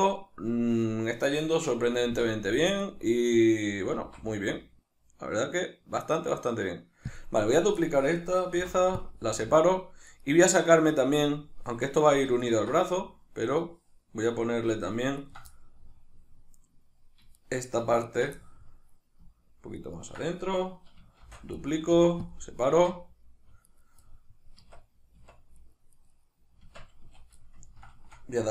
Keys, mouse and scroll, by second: 2.0 shift+d, 3.0 right click, 4.0 alt+s, 7.2 click, 7.8-10.1 shift+middle drag, 8.6 p, 10.1 right click, 12.4 ctrl+right click, 13.6-15.2 middle drag, 15.2 ctrl+right click, 15.5-17.4 middle drag, 17.4 shift+right click, 18.0 ctrl+right click, 18.4-19.8 middle drag, 19.8 ctrl+right click, 21.2 shift+d, 21.7 right click, 21.9 p, 22.7 Tab, 23.7 right click, 24.0-25.5 middle drag, 24.6 Tab, 25.5 right click, 25.9 right click, 26.1 right click, 26.6 Tab, 27.0 a, 27.4-28.5 ctrl+middle drag.